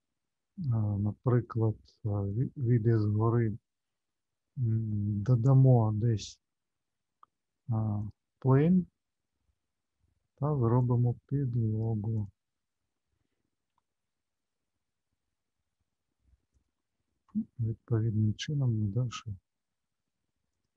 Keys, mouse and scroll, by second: 0.0-1.1 scroll down 4, 1.3 shift+middle click, 2.2 alt+middle click, 5.5 shift+right click, 8.0 click, 13.6 s, 18.3 s.